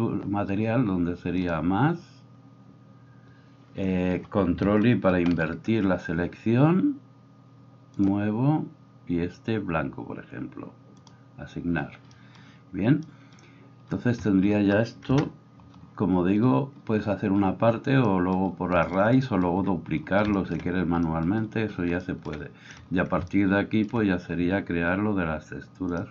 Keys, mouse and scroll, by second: 1.4-26.1 drag, 5.1 ctrl+i, 15.1 KP_0.